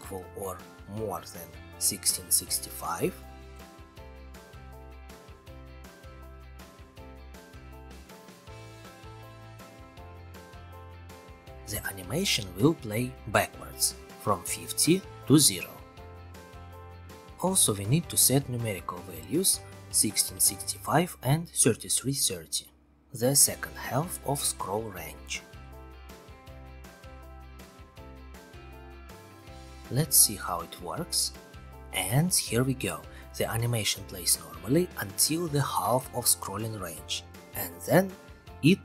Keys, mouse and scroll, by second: 1.3 click, 2.0 ctrl+c, 2.2 ctrl+v, 4.3 click, 5.5 click, 7.7-8.7 drag, 12.7 click, 14.9 click, 15.5-17.5 typing, 16.8 click, 18.1 click, 19.2-20.8 typing, 20.9 click, 22.2-23.6 typing, 23.9 Return, 25.5-26.4 scroll, 28.3 click, 29.0 click, 29.2 ctrl+r, 30.5-32.6 scroll, 32.6-34.1 scroll, 35.0 scroll, 35.8-38.8 scroll.